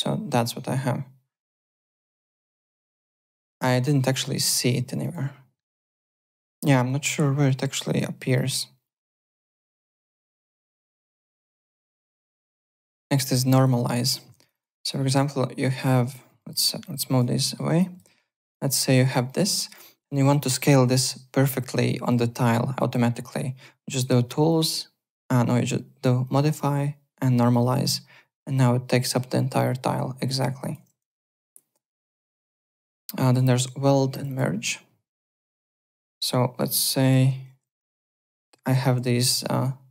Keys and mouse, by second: 2.3 click, 2.7-3.9 typing, 3.2 click, 3.8 click, 5.0 click, 7.9 click, 11.2 alt+middle click, 11.8 alt+Tab, 12.3 alt+click, 13.2 click, 13.9-14.7 typing, 14.4 click, 14.9 alt+middle click, 15.9 click, 16.4 alt+middle click, 16.8 click, 17.4 alt+middle click, 17.8 click, 18.5 click, 19.2 alt+middle click, 19.5 alt+right click, 23.9 click, 26.2 click, 27.4 click, 30.4 alt+click, 31.1 alt+Tab, 32.6 alt+Tab, 33.3 click, 34.1 click, 35.4 click, 36.1 click, 36.7-38.0 typing, 37.6 click, 38.3 alt+q, 39.0 click, 39.6 alt+click.